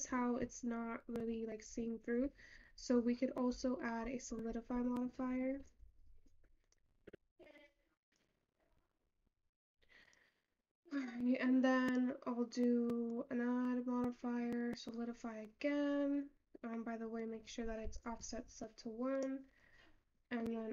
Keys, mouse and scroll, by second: 0.3 click, 0.9-8.1 drag, 12.0 click, 13.2-16.4 drag, 16.4-17.3 scroll down 5, 17.3-19.8 drag.